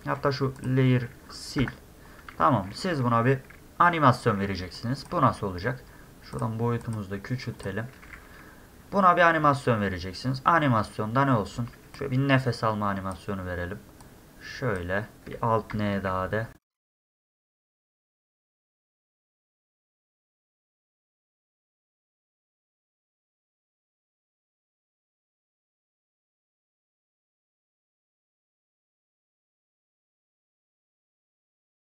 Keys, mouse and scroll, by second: 0.6 click, 4.6 space, 4.8 drag, 6.3 click, 6.8 click, 7.6 click, 8.1 e, 8.8 middle click, 9.3 middle click, 12.0-13.1 drag, 14.0 click, 16.8 click, 17.0 click, 17.1 click, 17.2 click, 17.3 click, 17.4 click, 17.7 click, 18.0-19.2 typing, 18.2 click, 18.2 middle click, 18.4 click, 18.5 click, 18.7 click, 18.7 click, 18.9 click, 19.2 click, 19.4 click, 19.6 middle click, 19.8 click, 20.3 click, 20.9 d, 21.1 drag, 21.2 click, 22.0 click, 22.6 e, 22.7 click, 23.1 middle click, 23.1 scroll, 23.2 click, 23.6 click, 23.9 click, 24.0 click, 24.9 click, 25.2 middle click, 25.3 space, 25.4 click, 25.5 space, 25.5 click, 25.7 middle click, 25.7 scroll up 1, 25.8 click, 26.0 click, 26.1 click, 26.3 click, 26.5 click, 26.7 click, 27.3 click, 27.4 click, 27.5 click, 27.8 drag, 28.4 click, 28.6 click, 28.7 click, 28.8 shift+drag, 29.0 click, 29.2 click, 30.1 click, 30.8 click, 31.4 click, 31.7 click, 31.8 click, 31.9 click.